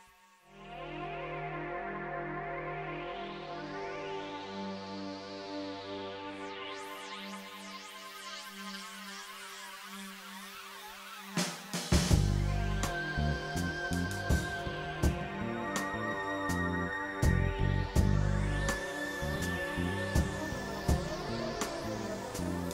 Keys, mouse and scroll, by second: 0.2 click, 1.5 click, 5.3 click, 6.2 click, 7.2 click, 8.0 click, 8.7 click, 9.6 click, 10.4 click, 11.3 click, 12.1 click, 12.8-13.6 drag, 14.5 click, 15.2 click, 15.9 click, 16.7 click, 17.4 click, 18.0 click, 18.8 click, 22.0 click.